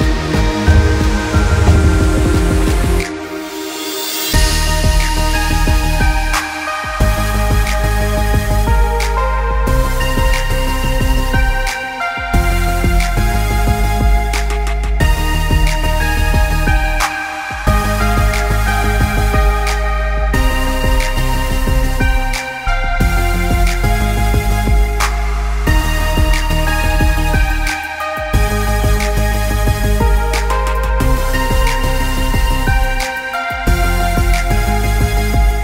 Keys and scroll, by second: 0.0 ctrl+i, 1.6 ctrl+=, 2.1 ctrl+space, 9.2 ctrl+z, 15.5 ctrl+0.